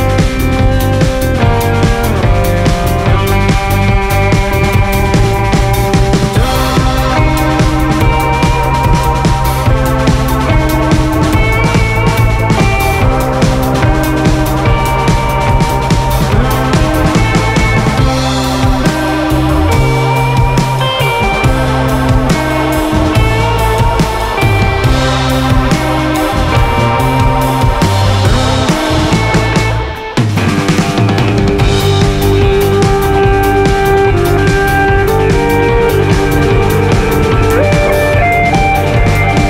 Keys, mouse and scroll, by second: 0.0 scroll up 1, 0.3 scroll down 1, 3.2 click, 6.1 click, 9.6-13.5 drag, 15.3-17.9 drag, 19.0 click, 19.9-23.1 drag, 24.6-30.9 drag, 28.9-29.5 scroll up 3, 29.5 scroll down 2, 32.5 click, 33.1 scroll down 1, 33.3 scroll up 1, 35.3 scroll down 1, 36.8 scroll up 1, 37.3 `, 38.2 KP_0, 38.8 KP_Decimal, 39.1 scroll up 1, 39.3 scroll down 1.